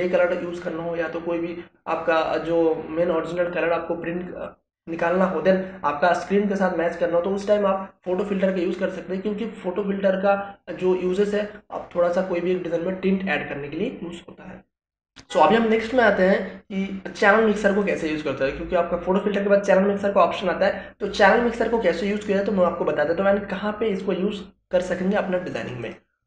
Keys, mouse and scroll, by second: 14.7 click, 17.1 click, 25.1 click.